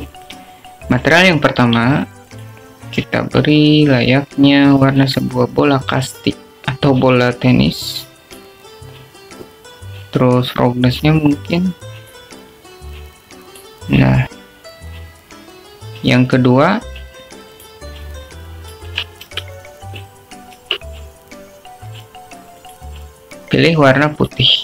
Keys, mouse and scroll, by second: 1.2 click, 1.7 click, 4.4 click, 14.3-15.8 drag, 19.8 click, 21.4 Tab, 22.8 Tab.